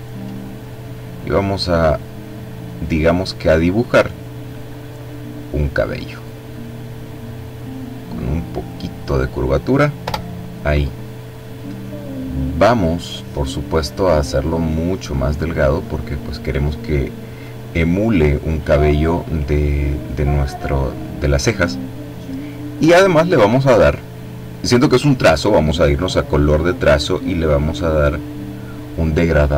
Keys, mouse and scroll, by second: 4.3 click, 6.9-9.3 drag, 9.9 Return, 13.5 click, 14.3-15.1 scroll down 1, 15.2-15.9 scroll down 1, 17.1 click, 22.5 click, 29.0 click.